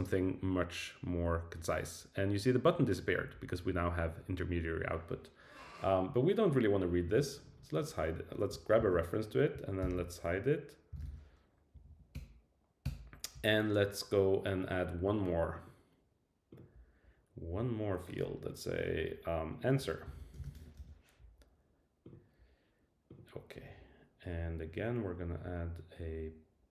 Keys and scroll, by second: 8.8 super+c, 9.8 super+k, 11.7 Down, 12.1 Return.